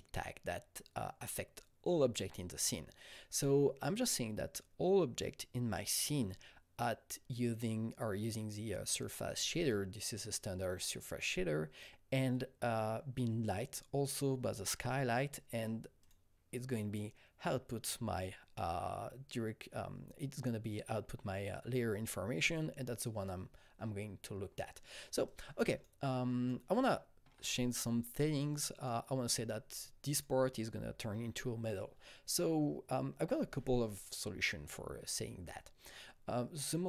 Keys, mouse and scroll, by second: 16.0 click, 25.3-27.7 drag, 26.9 alt+middle click, 27.2 scroll, 27.7 click, 28.5 double click, 30.1 click.